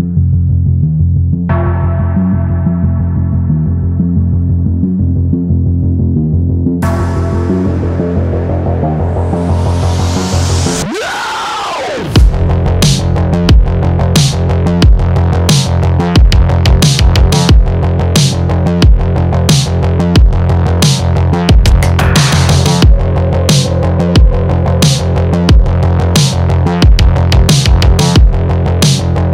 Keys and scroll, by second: 15.7 shift+Down, 23.4 Return.